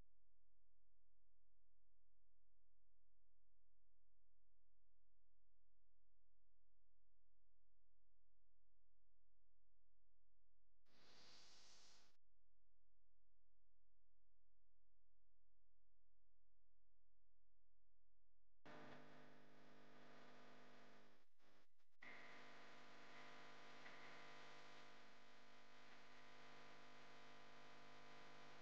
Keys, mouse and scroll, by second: 27.3 click.